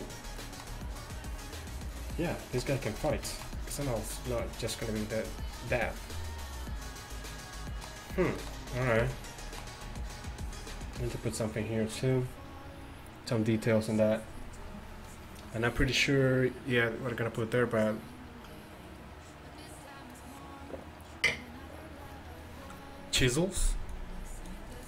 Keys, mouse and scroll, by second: 6.3-7.4 middle drag, 8.7-9.2 middle drag.